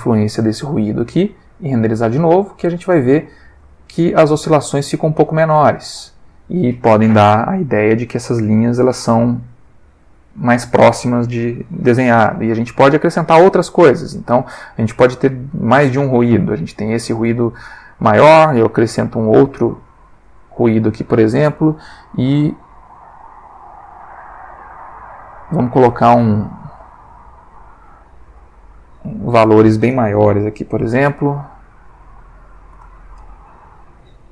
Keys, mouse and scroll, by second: 1.7 F12, 5.3 click, 12.7 middle click, 16.7 middle click, 17.8 click, 19.8 click, 20.3-21.0 middle drag, 24.7 click, 27.3 click, 28.6 Escape, 29.4 click, 32.4 3, 32.5 0, 32.7 Return.